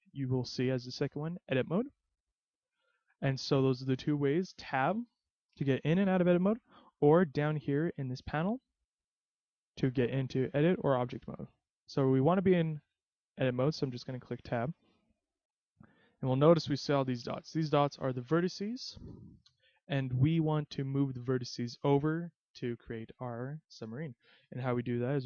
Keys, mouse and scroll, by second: 4.9 Tab, 6.0 Tab, 7.9 click, 9.3 click, 14.3 Tab, 15.9 middle click, 16.9-17.6 scroll up 4, 18.2-18.9 scroll down 4, 19.5 KP_3, 24.9-25.2 scroll up 1.